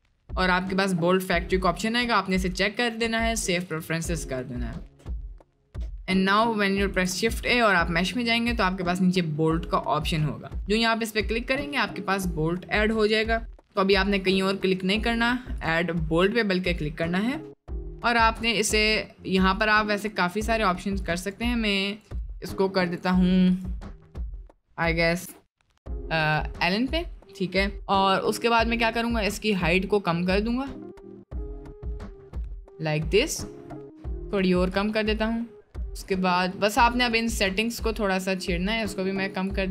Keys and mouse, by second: 5.9 middle click, 7.0 shift+a, 11.5 middle drag, 12.2 middle click, 13.3-13.7 shift+middle drag, 14.3 middle click, 15.5-19.7 drag, 21.2-32.0 drag, 32.4-32.8 middle drag, 33.2 middle click, 34.7-36.4 drag, 36.4 middle click, 37.1-39.5 drag.